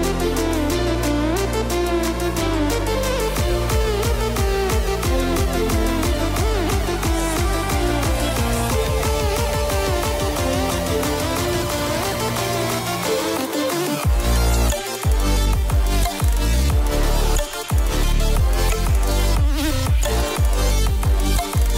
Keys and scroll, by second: 17.0 ctrl+t.